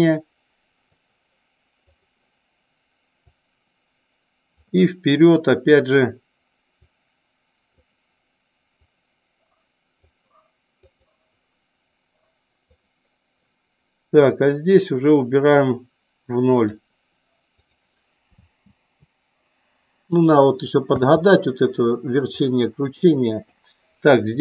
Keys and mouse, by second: 2.0 click, 3.4 click, 7.0-7.9 drag, 9.0-10.1 drag, 11.0 click, 12.7 click, 14.6-16.9 drag, 17.7 click, 22.5-23.7 drag.